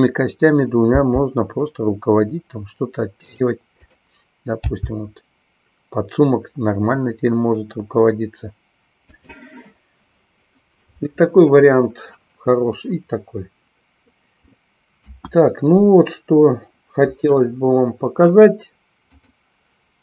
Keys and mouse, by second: 3.4 click, 3.7-5.0 drag, 9.2 click, 15.0 KP_1, 19.7 click.